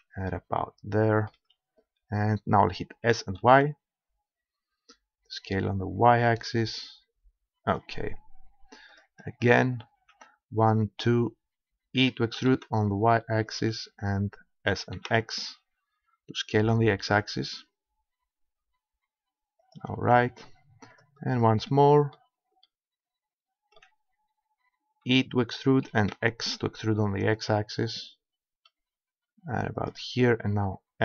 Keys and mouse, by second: 0.3-1.7 middle drag, 3.1 s, 7.8-8.9 drag, 8.9 middle click, 9.8-11.3 right drag, 12.0 e, 13.6-15.5 drag, 14.8 s, 19.8-21.0 drag, 21.0 middle click, 21.5 right click, 22.1-23.1 middle drag, 25.0 e, 29.9-31.0 drag.